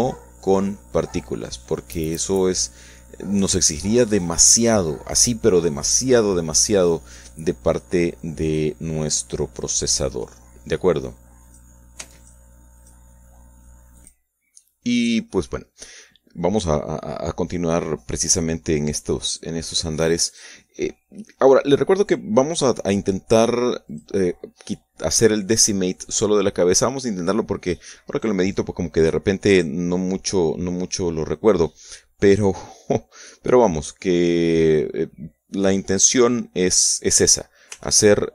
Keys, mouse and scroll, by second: 1.9-4.1 shift+drag, 3.5 shift+right click, 4.1 shift+middle click, 4.7 shift+middle click, 5.9 middle click, 6.3 middle click, 6.7 shift+middle click, 7.4 shift+middle click, 8.4 KP_Subtract, 12.7 click, 13.6 click, 16.5 ctrl+s, 17.1 ctrl+click, 17.8-19.9 shift+drag, 24.0 shift+h, 25.5 ctrl+h, 28.6 h, 30.4 alt+h, 31.6 shift+click, 33.7 Tab.